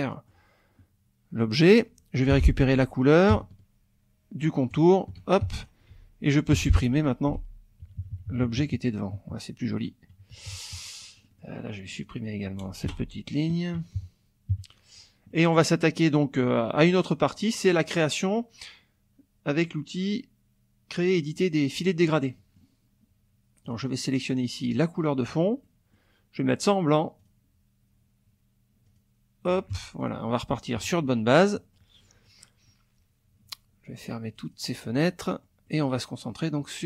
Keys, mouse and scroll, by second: 2.3 F7, 4.7 shift+click, 5.4 shift+F1, 5.6 shift+click, 6.2 shift+F2, 6.2 shift+click, 6.6 shift+F1, 7.3 Delete, 7.8 KP_Subtract, 9.6 click, 10.3 KP_Subtract, 11.1 click, 12.0 click, 12.8 Delete, 14.0 KP_Subtract, 15.3 middle click, 17.4 middle click, 21.8 middle click, 23.6 click, 24.6 click, 25.6 middle click, 27.2 click, 28.9 click, 29.7 F1, 30.0 click, 30.8 KP_Subtract, 31.4 click, 32.0 click, 34.0 click, 34.4 click, 35.2 middle click, 36.6 middle click, 36.7 click.